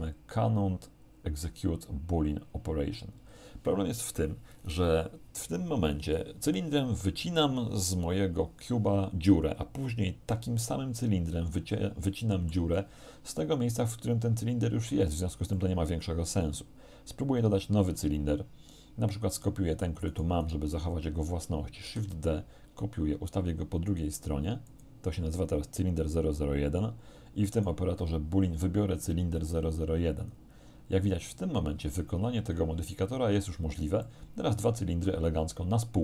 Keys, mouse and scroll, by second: 11.6-12.7 middle drag, 15.6-16.8 middle drag, 17.5 shift+a, 20.1 right click, 21.9 shift+d, 24.7 click, 27.6 right click, 29.1 click, 30.3 click, 34.1-36.0 middle drag.